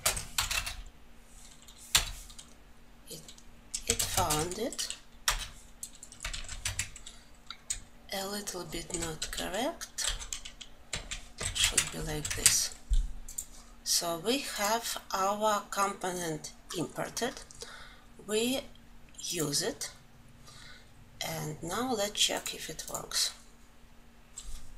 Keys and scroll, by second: 0.2 ctrl+space, 3.6 ctrl+space, 6.0 ctrl+alt+l.